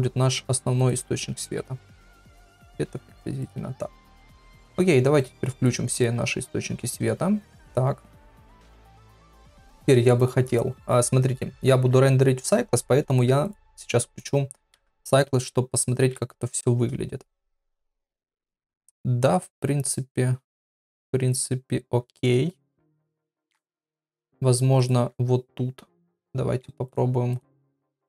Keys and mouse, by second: 1.5 KP_7, 2.2 g, 5.2 click, 5.5 click, 5.9 click, 13.5-14.5 drag, 24.8 click, 26.9 click.